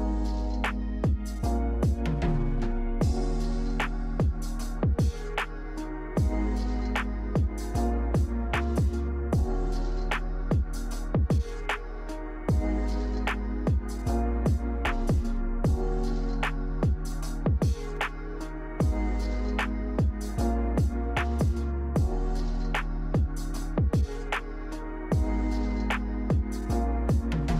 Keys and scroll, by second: 7.9 Delete, 17.7 i, 18.5 Delete, 23.4 v.